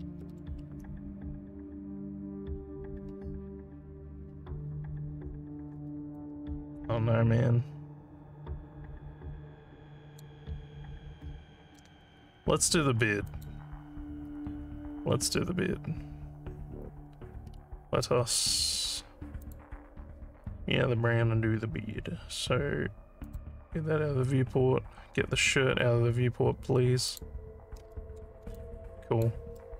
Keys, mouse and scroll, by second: 6.2-10.2 alt+drag, 10.5 alt+scroll down 2, 11.2 alt+middle click, 13.3 click, 17.5 scroll down 2, 19.4 click, 23.2 click, 27.0 click, 28.6 alt+click, 29.6 alt+middle click.